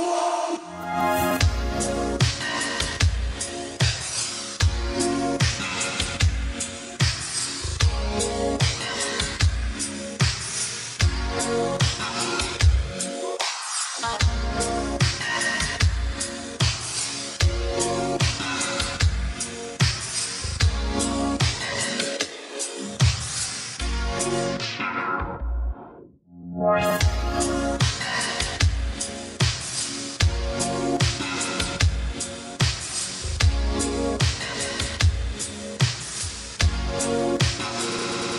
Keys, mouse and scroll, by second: 0.1 right click, 0.5 scroll down 1, 0.9 right click, 2.0 click, 2.4 right click, 4.1 click, 5.7-6.3 scroll down 1, 6.3 right click, 6.7 scroll up 1, 7.6 right click, 8.2-9.1 scroll up 1, 9.1 click, 9.7 right click, 10.2-10.6 scroll down 1, 10.6 right click, 11.2-12.6 scroll up 1, 12.6 click, 13.2 right click, 13.9-14.2 scroll down 1, 15.1 click, 15.6-17.5 scroll up 1, 17.8 click, 27.2 space, 29.7 BackSpace, 30.0 space, 34.3 space.